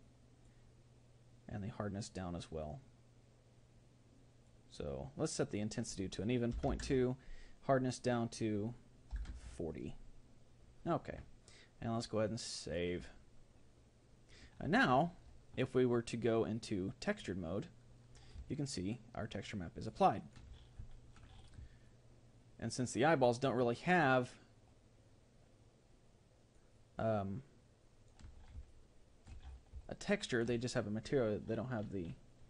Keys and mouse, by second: 2.1-10.8 drag, 16.2-17.9 drag, 18.5-25.6 middle drag, 26.7-32.0 middle drag.